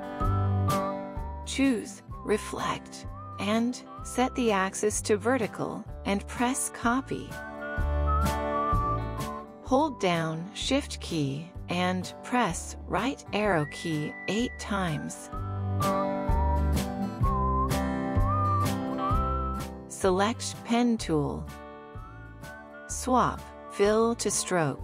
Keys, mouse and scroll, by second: 11.2 shift+Right, 11.9 shift+Right, 12.6 shift+Right, 13.2 shift+Right, 13.9 shift+Right, 14.6 shift+Right, 15.2 shift+Right, 15.9 shift+Right.